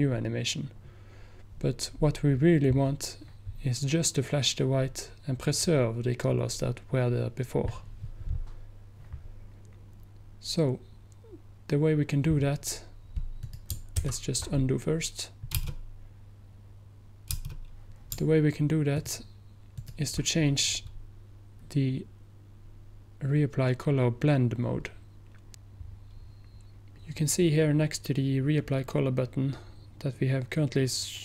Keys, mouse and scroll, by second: 13.5 click, 14.1 ctrl+z, 19.9 ctrl+click.